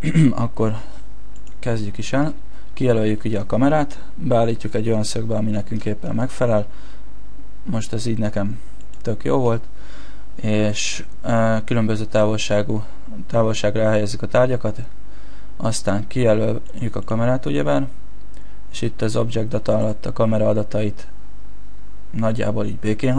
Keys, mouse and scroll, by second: 1.4 right click, 2.8 shift+middle click, 4.5 KP_0, 16.6 right click, 17.0 right click, 19.8 click.